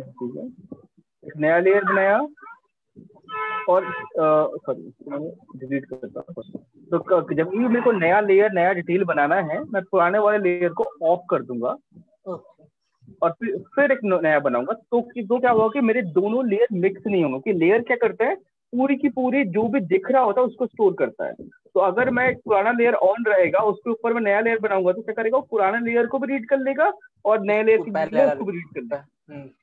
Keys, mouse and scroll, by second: 2.6 click, 4.8 click, 10.0 click, 13.4 click.